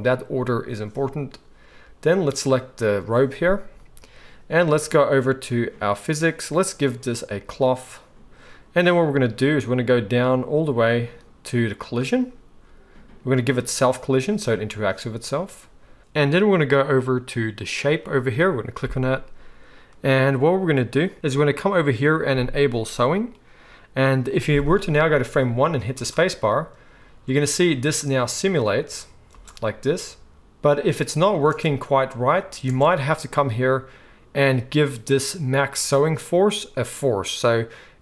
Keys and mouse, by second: 6.0 click, 7.4-13.7 drag, 16.0-23.1 drag, 25.9 space, 29.4-38.0 middle drag, 29.4 space, 31.5 space, 32.7 space.